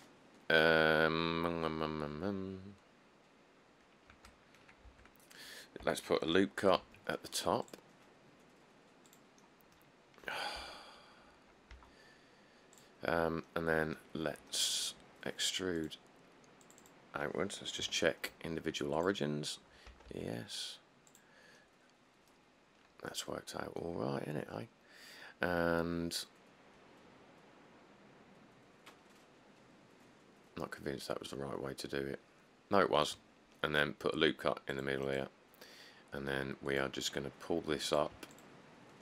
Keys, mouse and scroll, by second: 4.3 Tab, 5.1 Tab, 6.0 Tab, 7.0 ctrl+r, 10.7 1, 11.9 q, 14.4 middle click, 14.5 middle click, 18.0 ., 20.1 typing, 24.3 middle click, 24.3 middle click, 24.5 middle click, 34.3 ctrl+r.